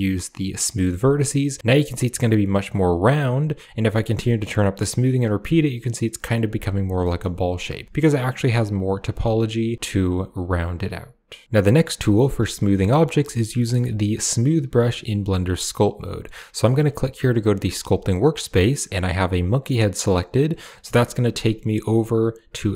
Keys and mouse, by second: 1.5-3.6 drag, 4.1-6.2 drag, 6.9 middle click, 7.6-8.9 drag, 9.1-11.3 drag, 12.6 shift+middle click, 13.4 shift+middle click, 20.1 click.